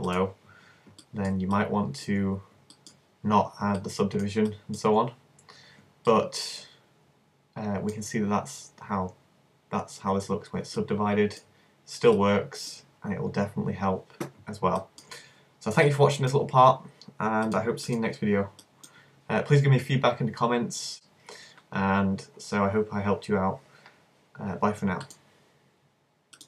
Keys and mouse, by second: 0.3 click, 1.0 middle click, 8.0-12.2 middle drag, 18.0 click, 18.8-22.4 middle drag.